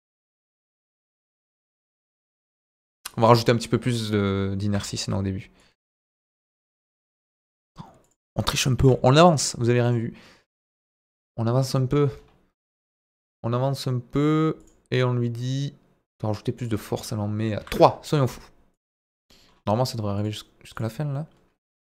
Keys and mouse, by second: 0.2 click, 0.7-4.8 drag, 5.6-7.0 drag, 8.0 click, 8.7 g, 8.8 middle click, 9.2 click, 9.8 click, 15.4 click, 16.5-18.1 drag, 20.2 click, 20.7-21.9 drag.